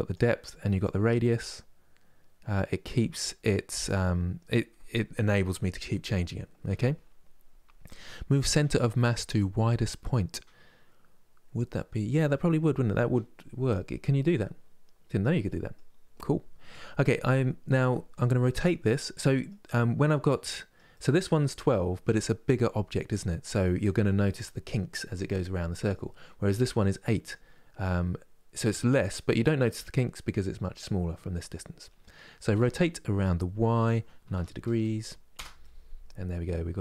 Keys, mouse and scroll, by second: 13.9-19.4 middle drag, 19.4-19.9 scroll up 2, 19.9-21.4 middle drag, 21.4 scroll down 1, 25.2-27.4 middle drag, 27.4-27.7 scroll up 2, 28.9-30.0 middle drag, 30.0-32.2 scroll down 2, 32.2 r, 35.3-36.8 middle drag.